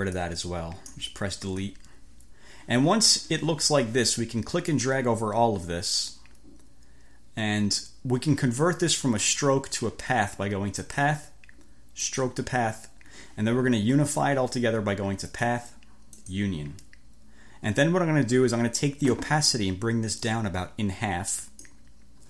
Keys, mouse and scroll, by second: 0.3 click, 1.6 Delete, 4.8-6.4 drag, 10.9 click, 12.2 click, 15.4 click, 16.2 click, 20.2-21.9 drag.